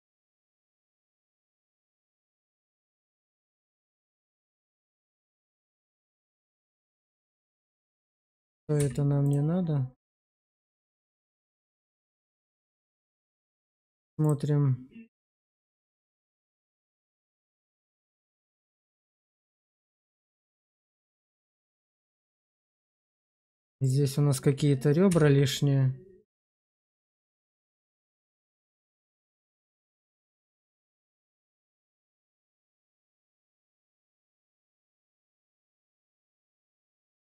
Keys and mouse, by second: 0.1 click, 2.0 shift+click, 2.4 middle click, 3.3 shift+middle click, 3.9 Tab, 4.5-4.8 drag, 5.0 click, 5.4 q, 6.7-7.1 drag, 7.5 click, 8.6 x, 10.0 shift+drag, 10.7 drag, 11.1 Tab, 11.8 shift+middle click, 11.8 shift+click, 12.1 click, 12.4 q, 15.5 click, 15.7 Tab, 16.3 click, 17.4 click, 18.6 click, 19.5 alt+q, 20.1 click, 23.2 Tab, 25.0 x, 26.9-28.8 middle drag, 29.0 shift+middle click, 29.4 middle click, 30.5 click, 30.9 middle click, 32.1 shift+middle click, 32.5 middle click, 34.1 x, 35.7 middle click, 36.3 Tab, 36.9 click.